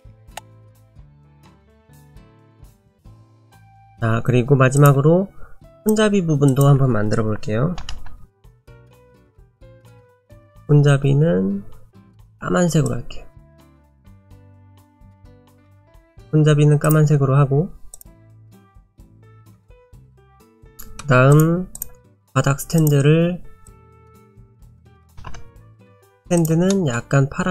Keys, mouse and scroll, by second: 0.4 click, 1.2 click, 1.8 click, 3.0 click, 3.2 click, 4.8 click, 5.8 click, 9.8 click, 16.9 click, 18.0 click, 19.0 click, 20.3 click, 20.6 middle click, 20.7 middle click, 21.0 scroll down 1, 21.3 click, 21.7 click, 22.8 click, 23.7 click, 26.4 click, 26.7 middle click.